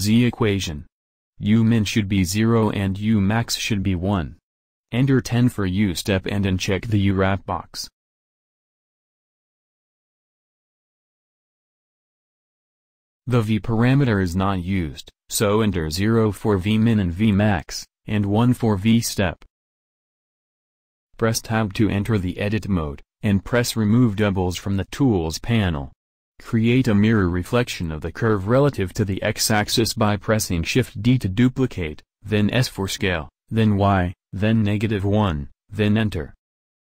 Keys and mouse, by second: 6.9-8.7 drag, 10.1-11.9 drag, 13.1-14.2 drag, 21.8 Tab, 27.5 shift+d, 28.5 s, 36.0 alt+Tab, 36.9 alt+Tab.